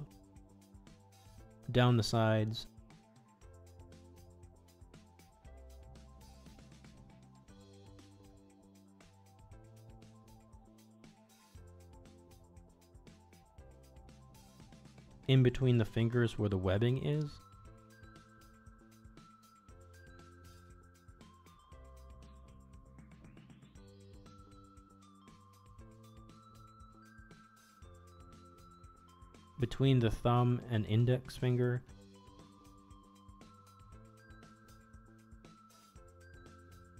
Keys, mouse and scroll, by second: 1.7-4.0 middle drag, 4.5 middle click, 5.3 middle click, 6.5 alt+click, 6.8 middle click, 8.1 alt+shift+click, 8.6 middle click, 9.0 ctrl+z, 9.1 middle click, 10.3 middle click, 10.9 alt+shift+click, 11.3 middle click, 12.6 middle click, 13.1 ctrl+e, 15.3-16.6 middle drag, 16.7 shift+middle click, 17.1 middle click, 18.0 middle click, 19.1 alt+click, 19.7-20.9 middle drag, 21.7 alt+shift+click, 22.3 middle click, 22.8 shift+middle click, 23.1 middle click, 24.5 alt+shift+click, 25.0 middle click, 25.7 middle click, 26.3 ctrl+e, 27.7-29.9 middle drag, 30.3 middle click, 31.2 middle click, 32.5 alt+click, 33.0 middle click, 34.0 alt+click, 34.5-36.3 middle drag, 36.6 ctrl+e.